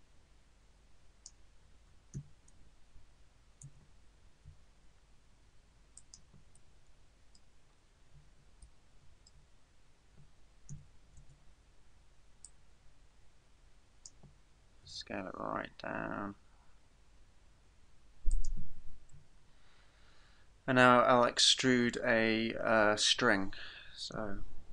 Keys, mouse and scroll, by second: 2.2 e, 4.5 s, 6.1 click, 6.8 middle click, 7.7 scroll up 3, 8.8 shift+middle click, 9.6 scroll up 1, 10.8 e, 12.4 click, 14.8 s, 18.5 click, 19.1 KP_1, 24.2 e.